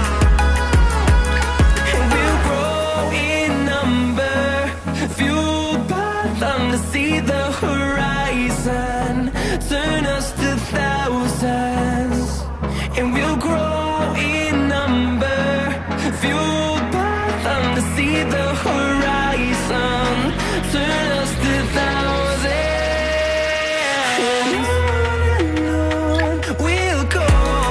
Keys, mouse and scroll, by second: 8.5 scroll up 2, 8.8 Escape, 8.9 Escape, 9.4-10.1 scroll up 1, 10.8 scroll up 2, 12.1 double click, 13.5 scroll down 5, 13.7 middle click, 14.2-14.7 scroll up 2, 15.1 double click, 17.3 double click, 19.5 scroll down 8, 19.8 middle click, 21.9 scroll down 2, 22.2 shift+middle click, 25.1 shift+middle click, 27.1-27.6 scroll up 5, 27.6 middle click.